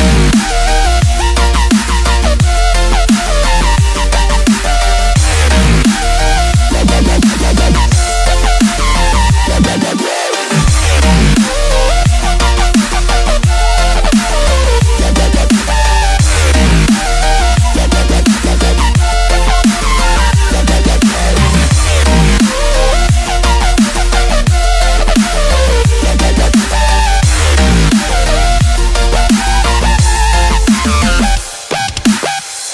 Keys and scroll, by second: 1.0 F1, 2.5 ctrl+space, 3.6 space, 3.8 n, 5.7 ctrl+space, 5.9 ctrl+space, 6.1 z, 7.9 z, 8.6 z, 9.3 space, 10.7 space, 12.0 z, 12.5 space, 13.1 space, 13.7 ctrl+0, 14.2 F7, 26.0 ctrl+z, 31.4 ctrl+z.